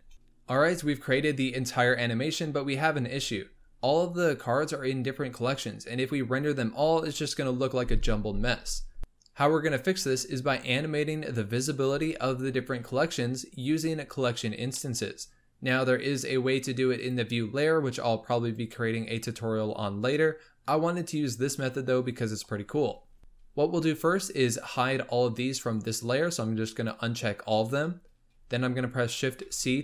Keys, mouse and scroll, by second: 0.0 scroll down 1, 0.2 scroll up 2, 9.0-11.3 middle drag, 14.7-16.9 middle drag, 16.9-18.5 drag, 25.6 click, 26.2 click, 26.7 click, 29.4 shift+c.